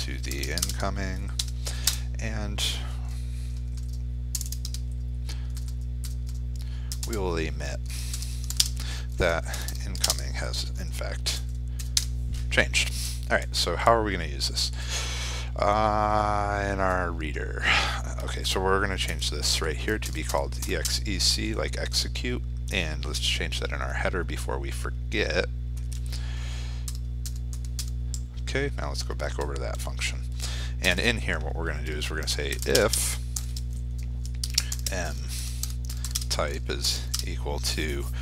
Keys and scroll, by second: 0.4 ctrl+space, 9.7 ctrl+space.